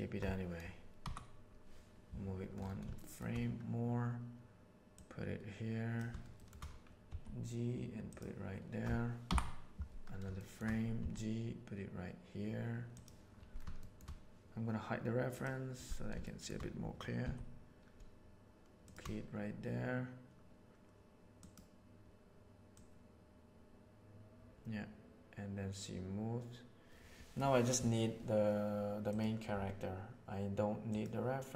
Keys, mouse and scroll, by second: 1.0 Up, 2.9 shift+middle click, 4.9-5.9 drag, 7.1 g, 9.4 Up, 10.4 shift+middle drag, 11.0 g, 13.9 shift+middle click, 16.3 shift+click, 17.2 g, 21.4 right click, 22.7-27.4 right drag, 29.1 right click, 30.9 right click.